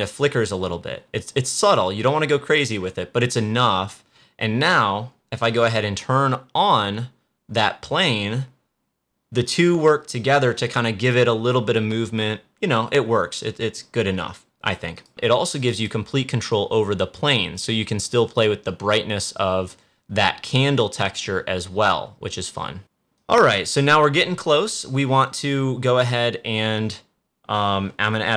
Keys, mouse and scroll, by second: 5.4 click, 14.8 click, 15.5 click, 18.3-22.8 drag, 23.0-25.9 drag.